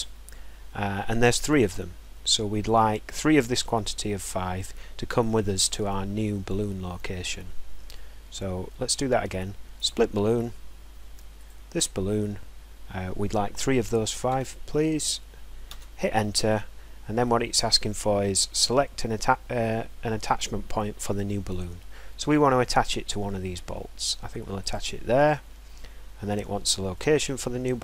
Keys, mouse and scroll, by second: 8.2 middle click, 10.1 click, 11.8 click, 11.9-12.7 scroll, 14.5 3, 16.0 Return, 17.0-17.6 scroll, 17.1 middle click, 18.0 scroll, 21.8-23.1 scroll, 25.0 click, 26.1 scroll, 27.2 scroll.